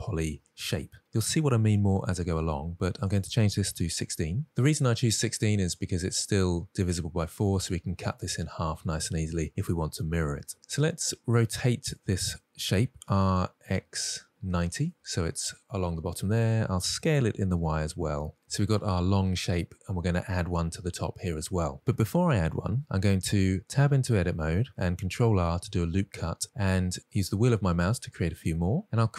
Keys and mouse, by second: 2.4-3.4 drag, 4.8-5.3 middle drag, 10.7-11.3 middle drag, 12.5 r, 13.3 x, 14.4 9, 14.7 Return, 14.7 0, 16.2 s, 16.7 y, 23.6 Tab, 25.0 ctrl+r.